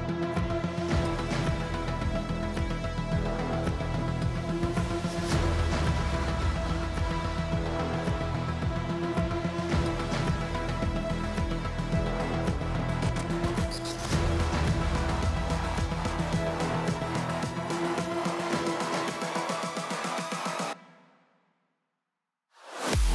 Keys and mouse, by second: 0.3 click, 1.3 click, 3.7 click, 4.1 click, 4.5 shift+drag, 6.0 alt+g, 6.7 shift+drag, 7.1 click, 7.9-9.1 middle drag, 9.7 KP_1, 11.0 n, 11.3 click, 11.6 shift+drag, 12.1 shift+a.